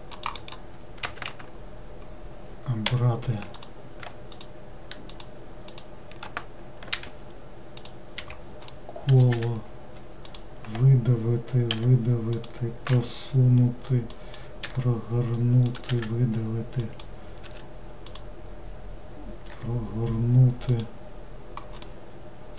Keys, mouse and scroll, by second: 1.1-2.9 right drag, 2.9 3, 3.6 click, 4.4 shift+click, 5.2 shift+click, 5.7 shift+click, 6.9 n, 7.9 click, 8.2 n, 8.8 middle click, 9.4 e, 11.8 e, 13.0 g, 14.7 r, 15.9 e, 17.5 5, 19.5 r, 21.9-22.5 middle drag.